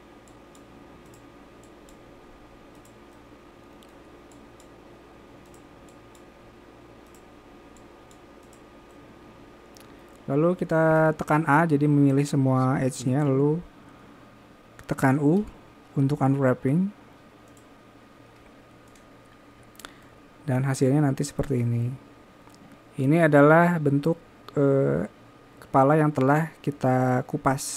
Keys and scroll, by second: 13.4 u.